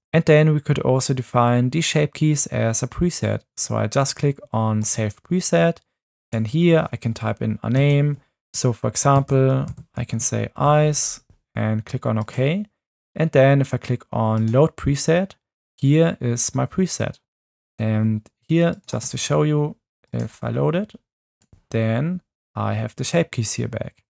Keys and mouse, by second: 4.9-12.2 drag.